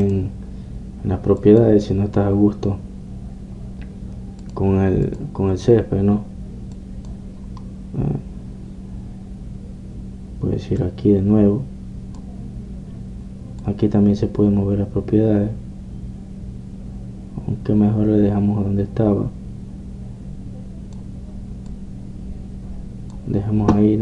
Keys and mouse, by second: 0.0 Escape, 3.4-5.0 drag, 5.0 click, 6.2 click, 7.8-10.6 drag, 10.6-11.6 middle drag, 13.5 click, 14.7-16.5 drag, 22.8-24.0 drag.